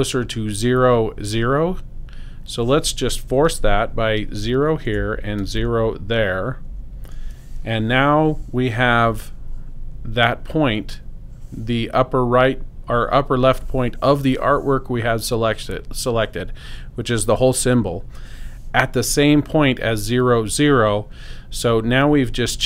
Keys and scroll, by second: 4.2 0, 4.9 Right, 6.4 0, 6.7 Return.